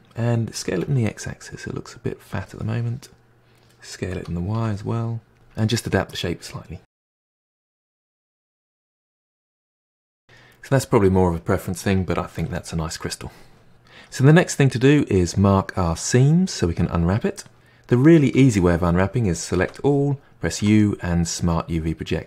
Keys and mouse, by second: 0.6 s, 2.6-4.1 middle drag, 4.1 s, 5.4 middle click, 5.9 Tab, 6.1 g, 6.6 g, 7.3 click, 8.0 middle click, 8.5 s, 8.8 middle click, 9.1 3, 9.3 click, 9.4 g, 9.6 middle click, 9.9 g, 10.0-11.8 middle drag, 14.1-17.3 middle drag, 19.6 a, 20.6 u.